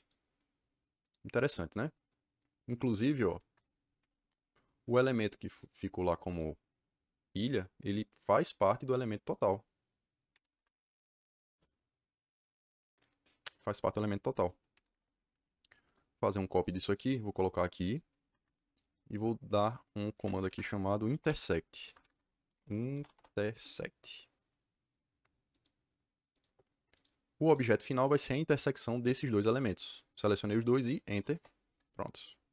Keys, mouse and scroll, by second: 0.9 click, 3.9 m, 4.2 Return, 4.8 click, 6.2 click, 8.2 click, 10.3 Escape, 14.4-15.3 typing, 15.8 click, 16.3 click, 16.6 right click, 16.8 click, 17.8 click, 18.2 Escape, 18.3 Escape, 18.4 Escape, 20.1 Escape, 20.4 Escape, 20.7-23.4 typing, 21.8 Escape, 21.9 Escape, 22.1 Escape, 25.4 click, 26.3 click, 26.9 click, 27.4 click, 31.2 KP_Enter.